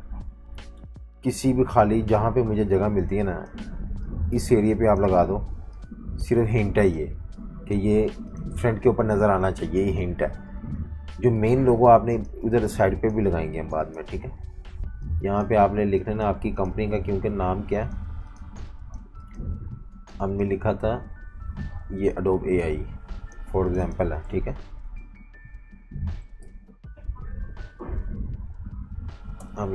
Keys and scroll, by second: 10.5 super+-, 10.6 super+-, 11.4-13.5 typing, 18.4-19.9 typing, 24.3 Right, 24.8 Right, 24.9 Right, 25.0 Right, 27.4 BackSpace, 27.6 BackSpace, 29.4 h.